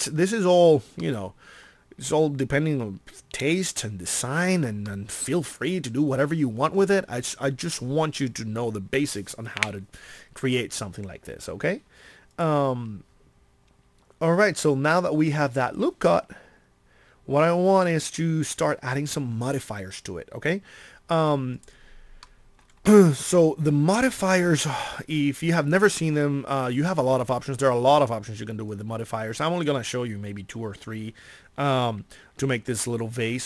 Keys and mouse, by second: 28.9-31.7 middle drag.